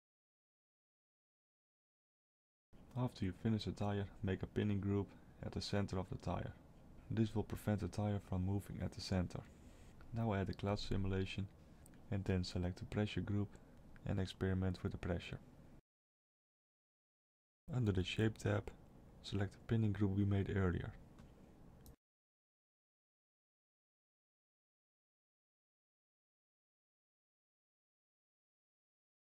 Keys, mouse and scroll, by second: 0.5 click, 2.9 click, 8.3 click, 9.3 Tab, 11.1 click, 11.8-12.3 scroll down 1, 13.2 click, 13.2-14.1 scroll down 3, 14.7 click, 16.9 scroll down 2, 17.7 scroll down 2, 18.0 click, 18.9 click, 21.5 middle click, 22.4-22.9 scroll down 2, 22.9 middle click, 25.1 click, 27.5 m.